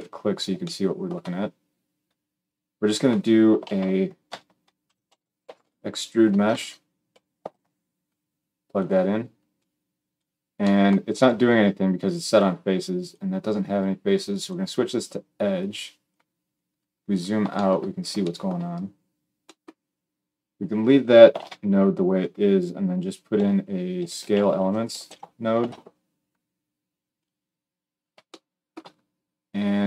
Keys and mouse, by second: 3.5 shift+a, 6.5 BackSpace, 9.5 click, 10.1-12.9 middle drag, 12.9-27.2 drag, 21.3 shift+a, 27.2-29.7 middle drag, 29.7-29.8 drag.